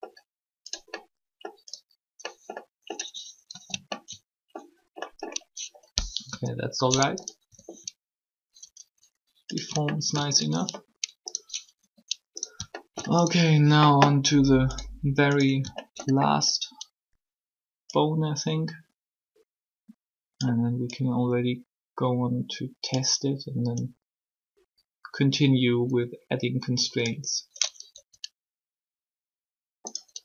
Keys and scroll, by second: 3.5 ctrl+z, 6.0 3, 11.8 r, 27.9 r.